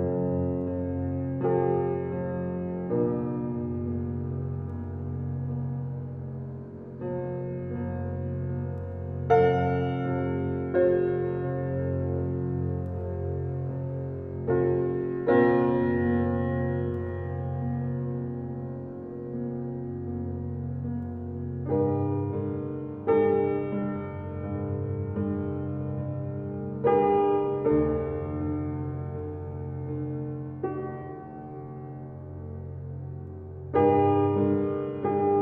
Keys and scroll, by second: 10.8 space, 21.7 space.